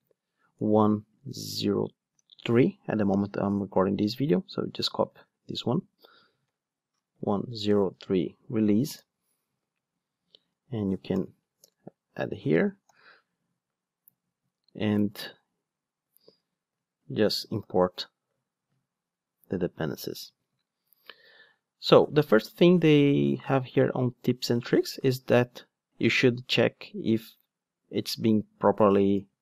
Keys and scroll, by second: 0.4 super+x, 8.9 Return, 11.2 alt+super+v, 12.9 alt+super+l, 16.2 shift+Tab, 17.5 shift+super+i.